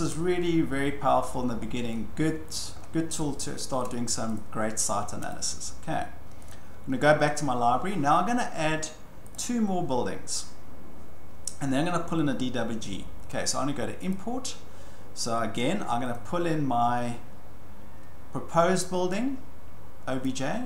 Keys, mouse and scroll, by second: 0.1 scroll, 1.3-2.0 scroll, 2.5 click, 2.8 scroll, 3.8 shift+scroll, 4.4 click, 5.3 click, 6.1-6.5 scroll, 6.5 click, 9.3 click, 14.1-15.7 drag, 20.2 click.